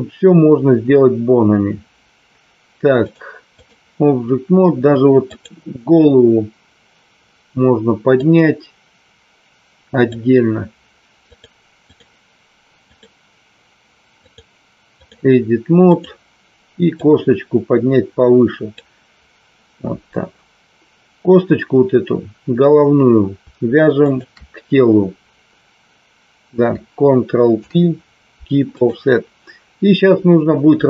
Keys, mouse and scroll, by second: 3.1-3.6 drag, 5.3 click, 8.1-10.1 drag, 11.3 click, 14.1-15.1 drag, 17.0-18.6 drag, 24.1 shift+click, 27.5 ctrl+p.